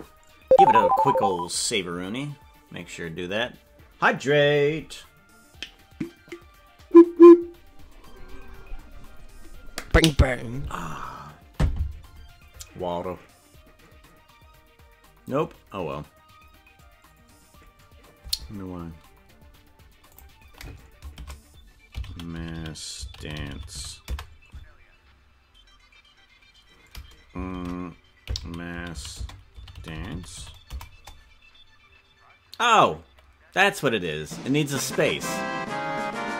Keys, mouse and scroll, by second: 1.8 ctrl+s.